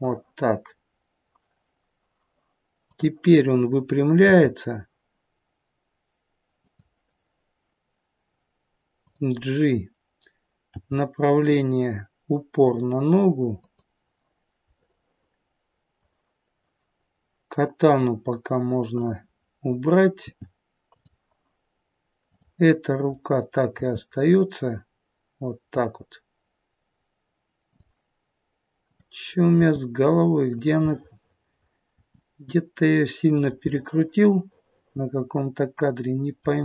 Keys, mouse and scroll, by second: 2.8 click, 4.2 r, 9.0 click, 10.6 g, 14.7 middle click, 17.7 click, 18.9 click, 20.2 g, 22.1 click, 23.0 middle click, 23.6 g, 28.7 click, 29.4 r, 30.7 middle click, 31.8 r, 33.5 middle click.